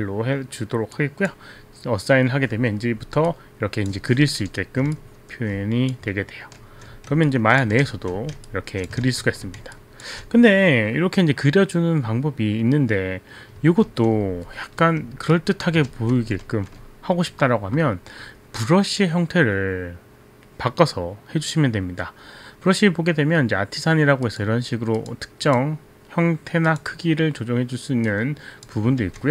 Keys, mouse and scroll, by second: 0.9 click, 3.4 click, 5.0 alt+click, 6.7 ctrl+z, 7.3 alt+click, 7.9 ctrl+alt+z, 8.5 alt+click, 9.4 ctrl+z, 9.8 alt+click, 12.2 click, 13.8 ctrl+z, 15.4 alt+click, 15.9 alt+t, 16.1 ctrl+z, 16.5 ctrl+z, 24.3 click, 25.0 click, 25.5 click, 26.6 click, 28.7 click.